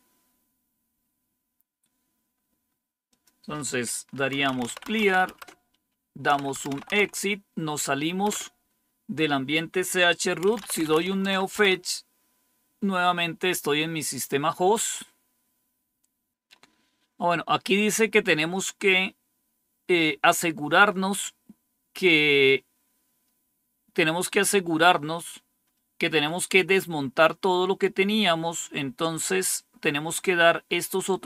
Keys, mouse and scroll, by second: 0.5-1.5 scroll down 2, 1.5-2.6 scroll down 1, 3.0 click, 4.0-7.3 typing, 8.2 Return, 10.1-11.4 typing, 11.5 Return, 18.7-20.7 scroll down 1, 20.7-26.7 scroll up 1, 30.4-31.2 scroll down 1.